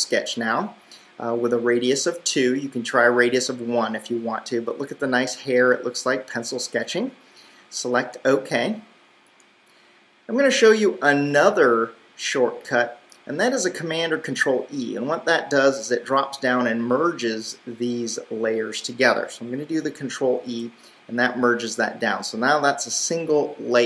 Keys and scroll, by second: 20.9 super+e.